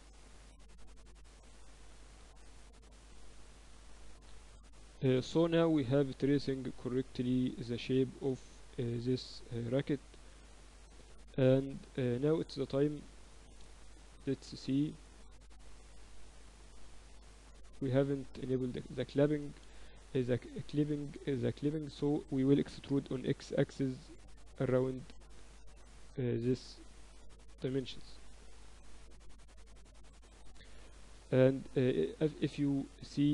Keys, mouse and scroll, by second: 0.5 g, 2.9 g, 4.1 z, 4.7 Tab, 5.0 z, 5.9 Tab, 6.3 right click, 7.1 middle click, 7.7-9.1 drag, 7.7 right click, 8.0 z, 8.5 middle click, 8.9 Tab, 10.5 Tab, 10.9 Tab, 11.2 Tab, 16.2-18.1 right drag, 17.3-20.9 drag, 20.0 a, 20.6 a, 21.7 a, 22.0-24.0 right drag, 23.5 e, 27.9 Tab, 28.3 z, 28.7-31.9 middle drag, 31.2 Tab, 32.4 middle click.